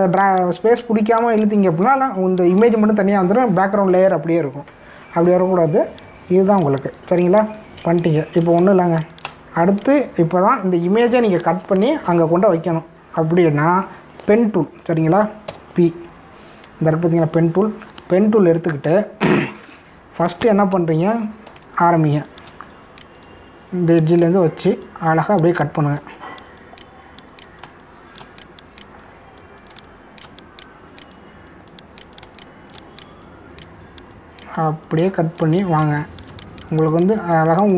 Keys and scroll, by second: 16.5 p, 22.0 ctrl+=, 22.5 space, 28.6 space, 30.8 space, 33.2 space, 36.8 space.